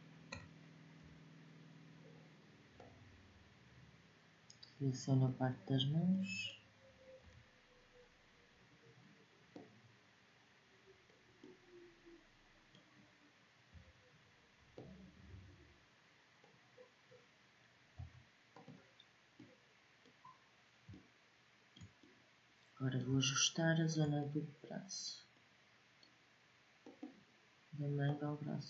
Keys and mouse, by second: 0.6 b, 5.4-6.9 middle drag, 6.9 b, 13.4-15.0 drag, 13.4 b, 17.6 Delete, 22.2-24.1 middle drag, 26.5-28.6 drag.